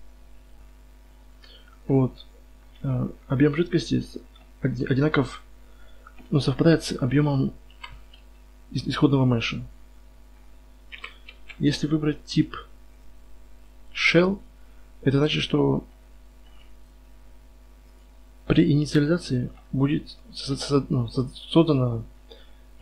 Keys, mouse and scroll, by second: 0.5-1.0 drag, 2.0-2.8 middle drag, 2.8 z, 3.6 z, 5.1 KP_1, 7.7 KP_Divide, 8.2 z, 10.9 KP_Divide, 11.4 KP_3, 11.9 z, 12.3-16.2 right drag, 16.2-20.3 middle drag, 20.3 KP_1.